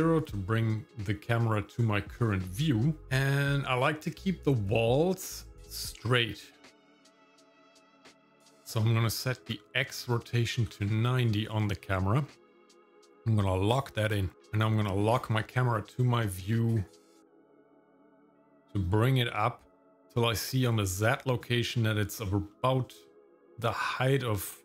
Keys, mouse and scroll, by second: 1.3-2.2 scroll up 3, 2.7 middle click, 7.7-10.9 drag, 13.7 click, 15.1 click, 15.7 middle click, 18.1-19.4 middle drag, 22.5-24.6 middle drag.